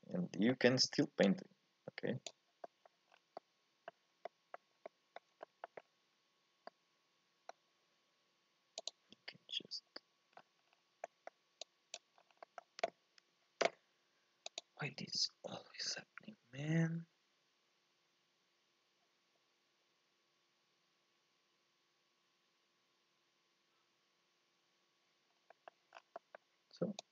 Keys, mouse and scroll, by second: 0.0-1.3 middle drag, 1.3-2.7 drag, 2.7 middle click, 3.2 scroll down 4, 3.4 middle click, 4.1 scroll up 1, 4.3 middle click, 4.8 scroll up 1, 4.9 middle click, 5.9-6.8 scroll up 2, 6.8-8.9 middle drag, 8.9 click, 10.3-10.7 scroll down 3, 10.7-11.0 scroll up 3, 11.0 middle click, 11.6 click, 12.1 scroll down 2, 12.3 scroll up 1, 12.4-25.3 middle drag, 25.3 scroll down 2, 25.5-27.0 middle drag, 27.0 click.